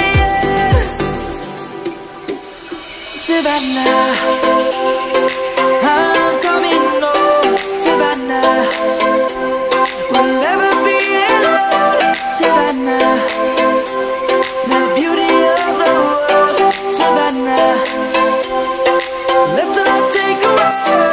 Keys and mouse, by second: 3.3 middle click, 6.8 1, 6.8 1, 8.5 click, 12.7 3, 16.1 click.